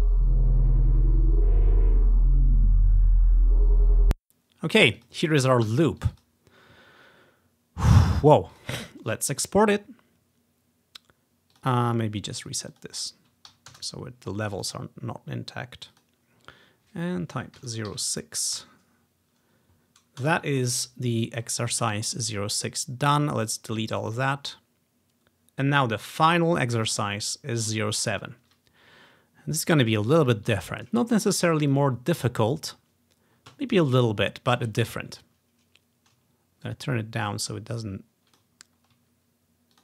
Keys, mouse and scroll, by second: 4.0 space, 4.9 click, 5.7 Delete, 6.1 click, 6.2 click, 8.6 click, 11.6 click, 12.5 click, 13.5-14.1 typing, 13.8 Return, 14.6 click, 16.0 click, 17.7-19.1 typing, 20.3 typing, 21.3-22.0 scroll up 1, 22.0 scroll down 1, 22.1-22.7 scroll up 2, 23.5-25.6 drag, 25.8-29.0 drag, 29.8-33.2 drag, 33.9 ctrl+scroll up 2, 35.5-37.5 ctrl+scroll down 4, 36.7 click, 37.5 ctrl+scroll up 1, 38.4-39.8 ctrl+drag, 38.7-39.8 ctrl+scroll down 1.